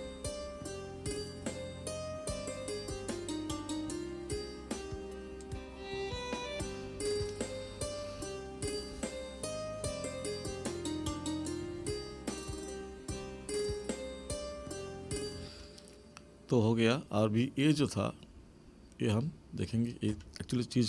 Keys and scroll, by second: 15.4 space.